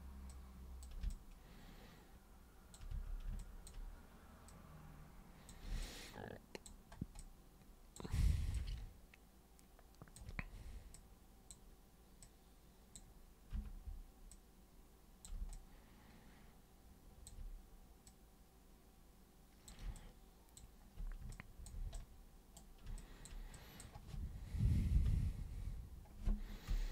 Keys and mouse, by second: 0.3 super+click, 1.1-2.7 alt+super+drag, 2.9 super+w, 3.3 alt+super+click, 4.4-5.5 super+drag, 5.8 alt+super+click, 7.2 alt+super+click, 8.5-10.1 alt+super+drag, 10.9 super+click, 12.2 super+click, 13.5 super+r, 14.3 super+click, 15.5-17.2 alt+super+drag, 18.0 super+click, 19.9 alt+super+click, 21.3 alt+super+click, 21.9 super+right click, 23.0 alt+super+click, 23.5 super+drag.